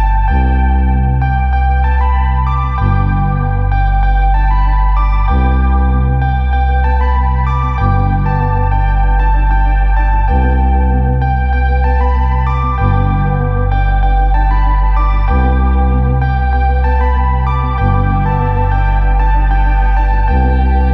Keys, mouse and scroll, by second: 0.5 alt+click, 1.4 shift+right click, 2.6 click, 4.0 click, 7.2 click, 8.4 click, 8.5 click, 9.3-11.3 typing, 12.8-13.6 typing, 12.8 click, 14.0 click, 14.1 click, 14.4 click, 15.0-20.9 typing, 16.0 click, 18.6 click, 18.7 click, 19.8 click.